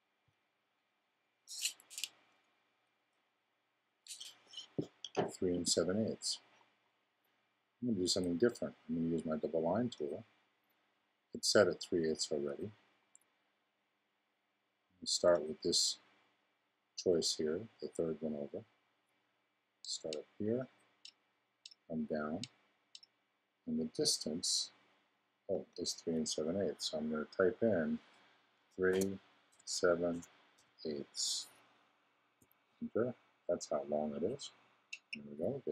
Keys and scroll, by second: 28.6 3, 30.5 8, 32.4 Return.